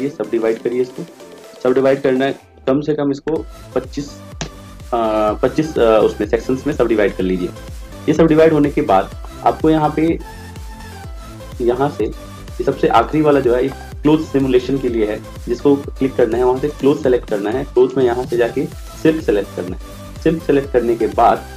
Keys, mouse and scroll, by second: 11.9-21.5 drag.